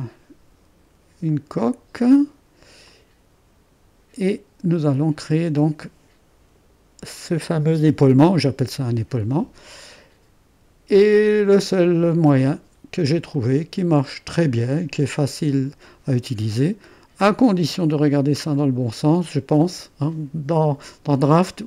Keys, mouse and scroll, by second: 2.0 space, 2.8-4.3 drag, 4.4 click, 4.9-6.0 drag, 10.9-13.0 drag, 13.3-16.5 drag, 18.5-21.5 drag.